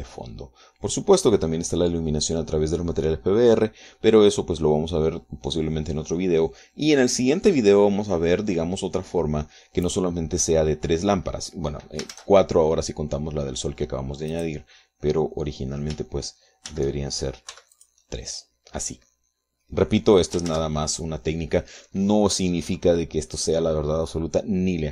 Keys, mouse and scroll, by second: 12.8 shift+z, 15.0 right click, 17.4 shift+z, 18.2 x, 18.5 click, 21.2 ctrl+z.